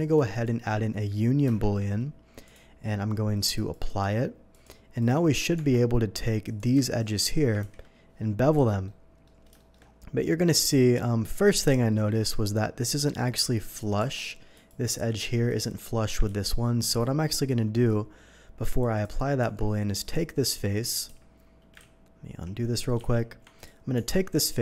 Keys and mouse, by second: 0.3 alt+shift+a, 1.4 ctrl+KP_Add, 2.5-8.8 drag, 5.6 Tab, 7.6 ctrl+b, 8.5 Escape, 9.5-17.2 shift+drag, 14.0 Tab, 16.3 ctrl+z, 16.8 ctrl+z, 19.4 Tab, 21.0 q, 21.1 Tab, 21.8 ctrl+z, 22.3 ctrl+z, 22.5 ctrl+z, 23.1 ctrl+z, 23.9 Tab.